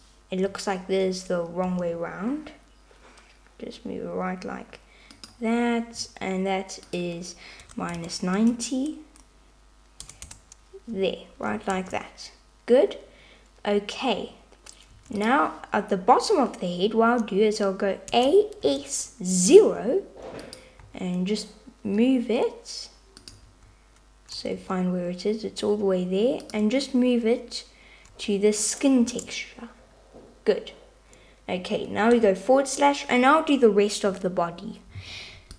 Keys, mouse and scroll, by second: 1.7 r, 7.6-10.7 drag, 11.8 Tab, 15.0 Tab, 18.2 a, 18.7 s, 20.9 g, 23.5 super+z, 24.6 g, 29.0 Tab.